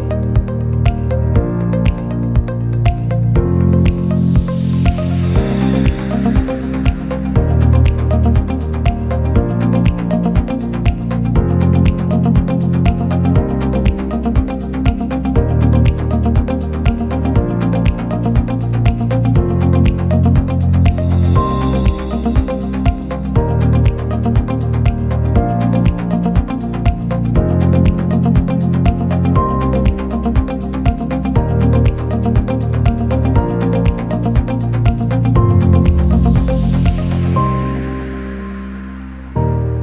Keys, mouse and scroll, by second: 0.0 click, 0.7 s, 1.7-2.2 middle drag, 2.2 click, 2.6 click, 3.3 n, 3.8 click, 4.2 click, 4.4 n, 4.6-5.1 middle drag, 5.1 scroll down 2, 5.6 scroll up 1, 5.8 scroll down 1, 6.0-7.0 middle drag, 7.2 n, 8.2 click, 8.4 n, 11.7 click, 11.9 scroll down 1, 12.0-12.4 middle drag, 12.4 scroll up 1, 12.5-12.9 middle drag, 12.9 click, 13.6 scroll down 2, 13.7-14.5 middle drag, 14.5 g, 15.4-16.2 middle drag, 19.8-21.5 drag, 21.7-22.4 drag, 22.5-23.2 middle drag, 23.4 click, 23.6-24.1 middle drag, 24.1 s, 24.8 click, 24.9 click, 25.2 s, 25.9 middle click, 26.7 r, 28.1 g, 28.9 click, 29.0-29.6 middle drag, 29.6 click, 30.1 g, 30.9 scroll, 31.2 click, 31.4 scroll down 2, 31.6-32.1 middle drag, 32.1-32.6 scroll down 2, 32.6 scroll up 2, 32.6 click, 33.5 shift+d, 35.2-35.7 middle drag, 35.8 click, 36.0 click, 36.4-36.8 middle drag, 36.8 scroll up 2, 36.9 middle click, 37.8 click, 38.8-39.8 middle drag.